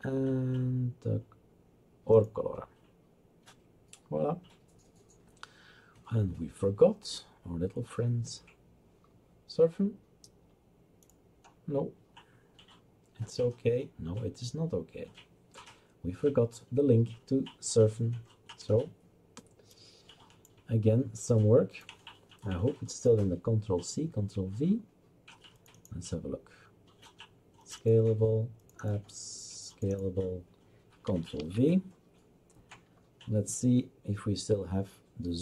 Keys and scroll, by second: 31.4 ctrl+v.